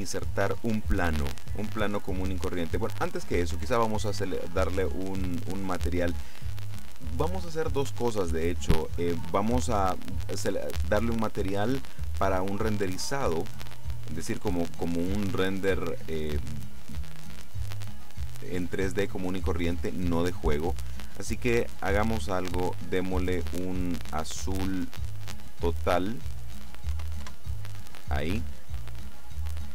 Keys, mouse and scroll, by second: 0.1-1.1 middle drag, 4.1 click, 13.4 click, 15.0 click, 25.7 click, 27.1 KP_0, 27.3 KP_Enter.